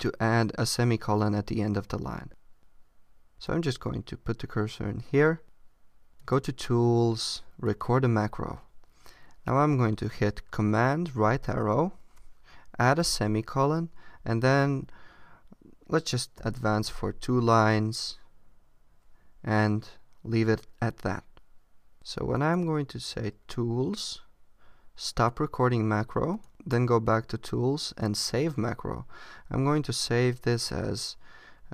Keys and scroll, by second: 11.2 super+Right, 16.4 Return.